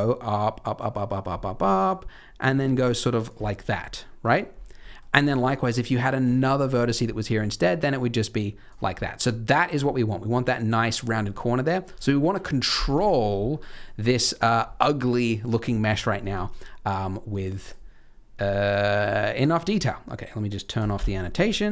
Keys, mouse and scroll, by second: 3.3 d, 3.5-3.8 scroll up 2, 3.8 middle click, 4.8 middle click, 5.2 middle click, 6.2 d, 6.3 click, 6.9 d, 7.5 click, 7.5 d, 8.6 d, 11.4 middle click, 12.9 z, 13.4 scroll down 3, 13.6 middle click, 14.3-15.9 scroll up 2, 16.2 n, 17.4 click, 17.6 click, 18.6 click, 19.0-19.6 scroll down 7, 19.5-19.8 scroll up 2, 20.7 click, 20.9 n, 21.1-21.7 scroll up 6.